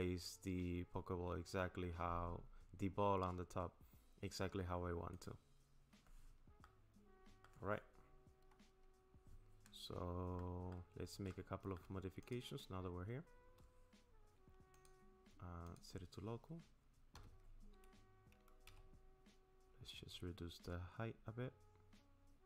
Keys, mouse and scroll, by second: 6.6 middle click, 10.0 scroll up 6, 10.4 middle click, 11.3 shift+middle click, 12.2 click, 14.7 click, 17.2 s.